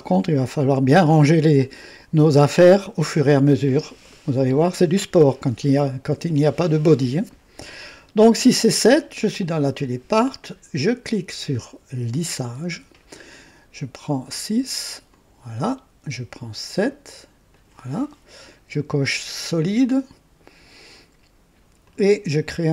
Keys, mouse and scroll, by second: 0.0 click, 12.1 click, 14.2 click, 15.1 click, 16.6 click, 17.5 click, 19.9 click, 21.8 click.